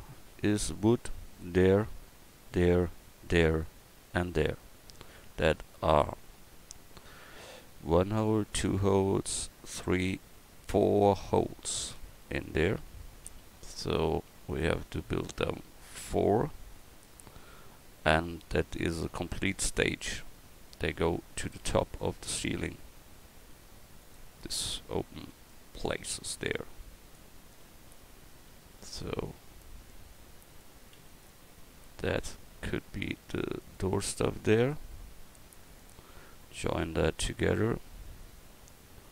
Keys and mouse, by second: 25.2 shift+d, 38.0-39.1 drag.